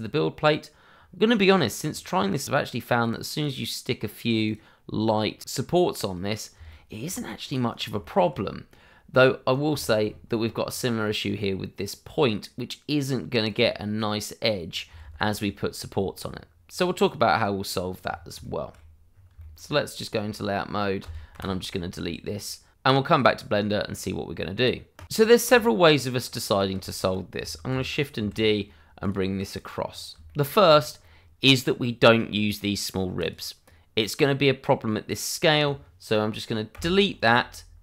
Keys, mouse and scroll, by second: 2.4 click, 4.0 ctrl+z, 5.4 click, 6.6-7.2 scroll down 1, 7.2 right click, 7.8 middle click, 8.1 right click, 8.4 shift+middle click, 9.1 right click, 9.7 shift+middle click, 10.0-12.7 shift+scroll up 1, 13.4 click, 15.0 ctrl+z, 15.9-17.0 scroll down 1, 17.0 right click, 17.7-18.1 scroll down 1, 18.4 shift+middle click, 19.1 scroll down 1, 19.3 shift+middle click, 19.9 click, 21.0 a, 21.3 Delete, 25.5 shift+middle click, 26.2 click, 26.8 middle click, 27.7 shift+d, 28.2 y, 29.0 click, 29.8-30.2 scroll up 1, 30.2 shift+middle click, 30.6-31.0 scroll up 1, 33.1 click, 36.7 Delete.